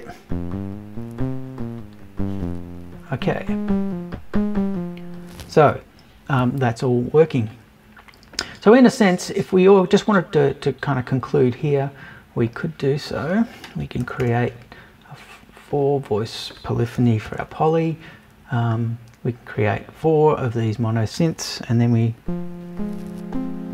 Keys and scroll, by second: 14.0 BackSpace, 17.0 BackSpace.